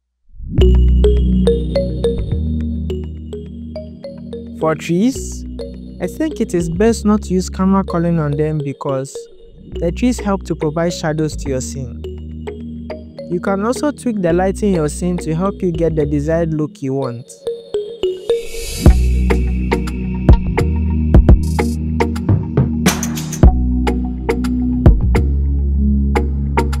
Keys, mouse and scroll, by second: 0.1 click, 0.2 e, 0.5-1.4 scroll up 9, 1.0 click, 1.4 click, 1.5 click, 1.9 scroll down 7, 2.0 scroll up 2, 2.4 click, 2.8 Home, 2.8 click, 2.8 click, 2.9 click, 3.0-3.6 scroll down 4, 3.0 click, 3.1 shift+click, 3.2 click, 3.3 alt+shift+click, 3.5 click, 4.0 click, 4.7 click, 4.9 scroll up 1, 5.1 e, 5.2 scroll down 3, 5.4 scroll up 1, 5.6 click, 5.8 click, 6.1 shift+click, 6.3 scroll down 8, 6.4 scroll up 4, 6.5 click, 6.7 click, 7.0 click, 7.4 click, 9.7 click, 10.0-11.0 drag, 13.2 click, 13.2 click, 15.4 click, 16.4 click, 16.8 click, 18.9 click, 22.9 click, 26.0 scroll up 2, 26.1 click, 26.3 middle click, 26.3-26.8 typing.